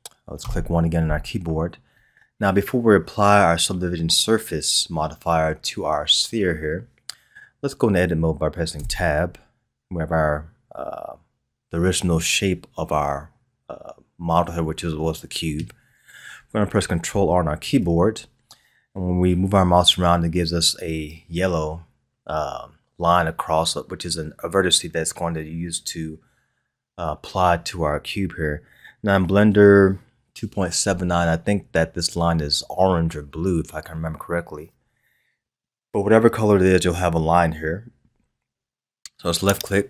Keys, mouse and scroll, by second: 0.4 KP_1, 1.8-2.6 scroll up 1, 2.6-3.6 scroll up 1, 3.6-4.8 scroll up 1, 8.8 Tab, 17.6 ctrl+r.